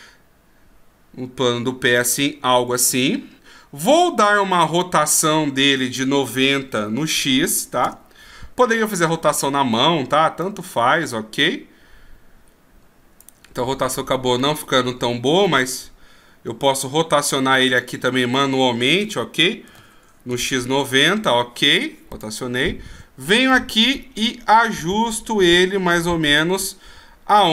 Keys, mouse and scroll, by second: 5.8 r, 10.4 click, 13.8 ctrl+z, 14.4 ctrl+z, 17.7 click, 19.0 r, 22.1 click, 23.5 click.